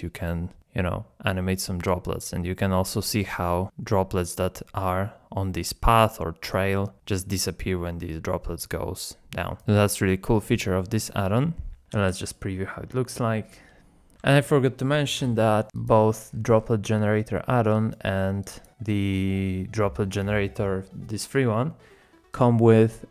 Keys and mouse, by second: 10.0 click, 10.8-11.5 middle drag, 12.9 z, 18.5 click, 19.1 click.